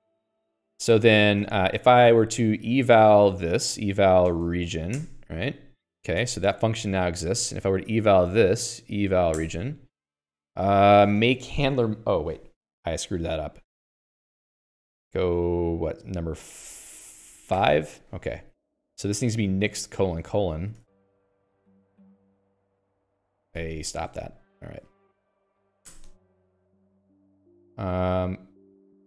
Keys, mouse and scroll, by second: 0.9-5.5 typing, 2.3 ctrl+s, 2.5 Escape, 6.6 Escape, 7.3-8.5 typing, 9.8 Return, 18.0 5, 18.7 Escape, 19.2-22.1 typing, 23.1 Escape, 23.9 Escape, 24.5 ctrl+s, 25.1-25.9 typing, 26.2 Return.